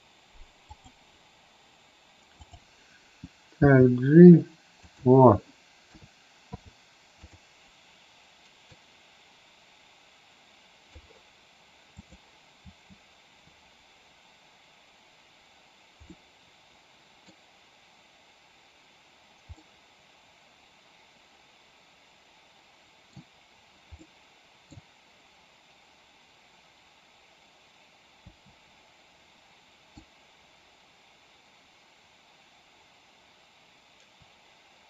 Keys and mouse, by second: 0.6 click, 2.4 click, 3.5 g, 4.7 click, 5.7 a, 6.5 i, 8.6-10.9 drag, 11.9 click, 12.6 space, 16.0-17.3 middle drag, 19.5-23.1 middle drag, 24.0-24.6 middle drag, 28.3 space, 29.9-34.8 drag.